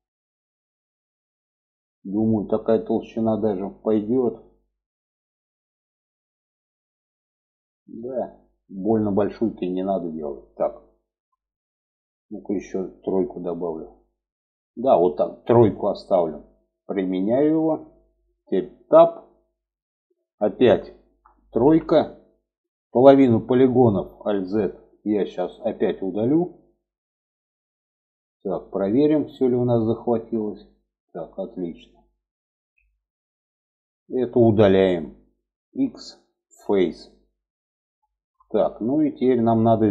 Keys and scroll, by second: 18.3 Tab, 20.9 3, 23.6 alt+z, 31.8 alt+z, 35.2 x.